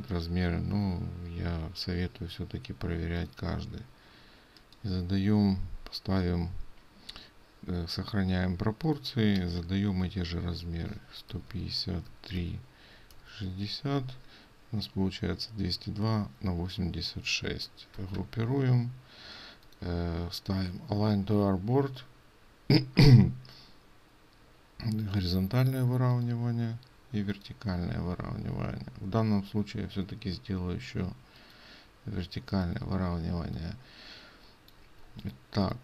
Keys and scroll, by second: 9.6 ctrl+a, 18.3 ctrl+g, 33.4 ctrl+space.